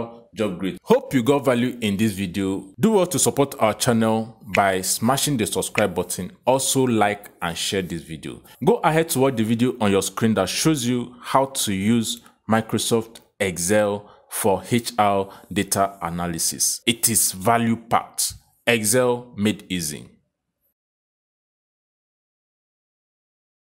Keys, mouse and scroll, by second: 0.7 click, 7.5 click.